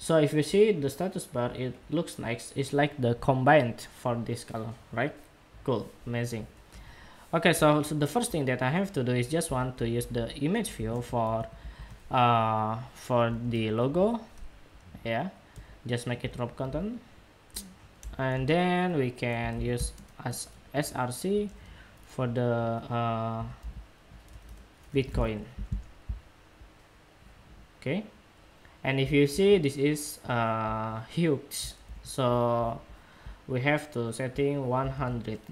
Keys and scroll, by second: 29.0 super+Tab, 31.5 super+=, 34.6 super+Tab.